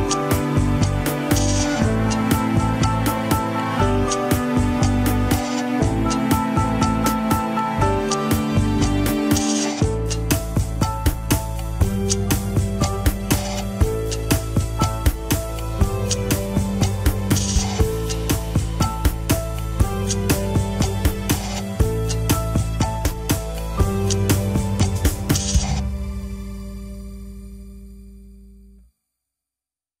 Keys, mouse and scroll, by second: 0.6 shift+click, 1.2 click, 1.7-2.1 scroll down 2, 2.1-2.7 scroll up 3, 2.5 shift+middle click, 3.2 r, 5.5 click, 6.4 g, 7.6-8.1 scroll up 2, 8.1 click, 9.0 g, 12.5-13.3 scroll down 2, 13.3 ctrl+Tab, 14.0 ctrl+Tab, 15.4 click, 16.3 g, 19.5 ctrl+Tab, 19.9 shift+drag, 20.2 ctrl+Tab, 22.7-28.3 drag, 29.1-29.5 drag, 29.5 ctrl+Tab.